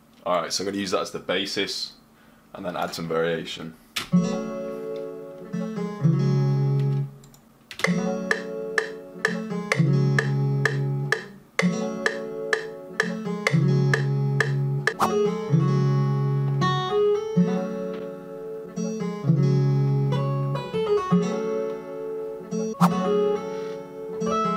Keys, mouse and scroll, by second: 6.7 click.